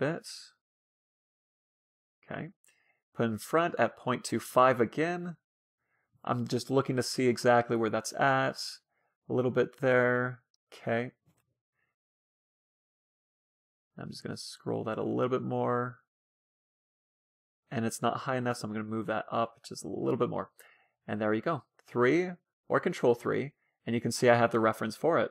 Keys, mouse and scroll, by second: 1.6-3.2 drag, 3.4-5.5 drag, 5.9 KP_3, 10.3 KP_3, 10.8 KP_1, 11.5 ctrl+KP_3, 13.7-15.2 drag, 18.8-20.3 drag, 21.7 KP_3, 23.4 ctrl+KP_3, 24.0 KP_3, 24.5 KP_3, 24.9 KP_3.